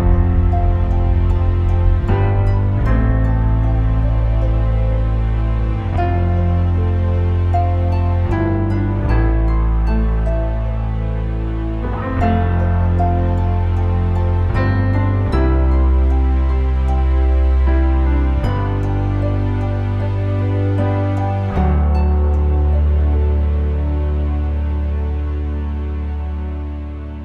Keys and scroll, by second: 1.2 1, 1.7 4, 2.0 Return, 10.2 2, 10.5 Return, 14.5 3, 15.9 Return, 16.4-17.4 typing, 17.5 Return.